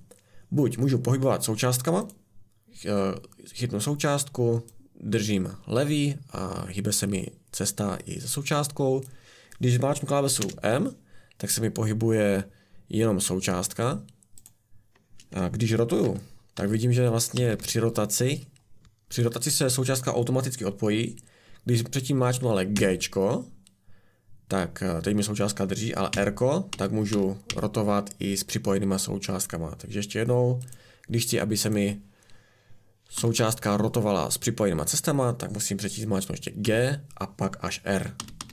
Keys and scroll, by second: 10.4 m, 16.0 r, 16.5 r, 17.5 r, 22.7 g, 26.1 r, 26.7 r, 27.4 r, 33.1 r, 33.3 r, 36.6 g, 38.1-38.5 typing.